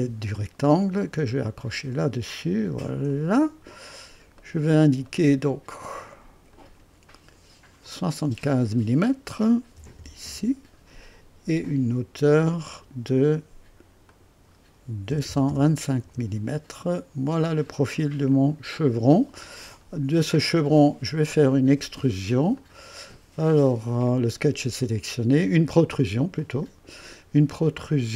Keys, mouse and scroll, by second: 1.8 click, 3.1 click, 4.0 scroll up 2, 4.4 right click, 5.1 right click, 6.5 click, 7.8 click, 9.8 KP_7, 10.0 KP_5, 10.2 KP_Enter, 10.2 Return, 12.6 click, 14.1 click, 15.1 KP_2, 15.5 KP_5, 16.1 Return, 18.3 click, 19.5 scroll down 1, 19.5 typing, 20.3 click, 22.5 click, 26.4 click.